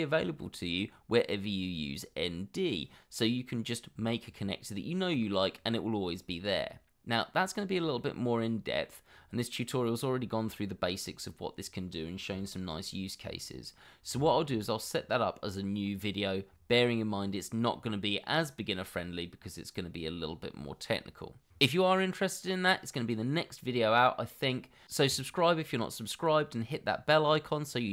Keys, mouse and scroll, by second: 7.3 scroll down 1, 8.0 middle click, 9.1 scroll up 1, 10.8 scroll down 1, 12.3 /, 12.9 scroll down 1, 13.5 middle click, 14.3 shift+middle click, 14.8 middle click, 16.0-16.8 scroll up 1.